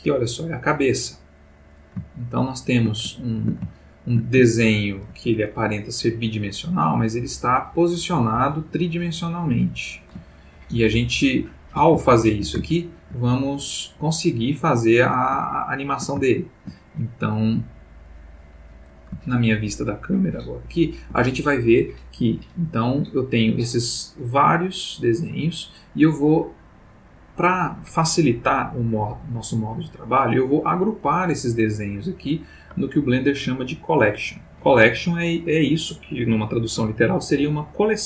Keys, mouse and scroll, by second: 1.0-1.9 middle drag, 2.1-2.7 shift+middle drag, 3.1-4.3 ctrl+shift+middle drag, 4.5-5.2 ctrl+shift+middle drag, 7.1-7.9 middle drag, 9.6 click, 10.4-11.8 ctrl+middle drag, 12.0-12.6 ctrl+shift+middle drag, 12.7-13.2 ctrl+shift+middle drag, 14.6 click, 15.4-16.8 ctrl+middle drag, 18.6 click, 19.2 ctrl+middle click, 20.0 ctrl+middle click, 20.4-21.2 ctrl+middle drag, 23.1 click, 23.6 click, 24.7 click, 25.1 click, 25.9-27.6 middle drag, 29.0-30.2 middle drag.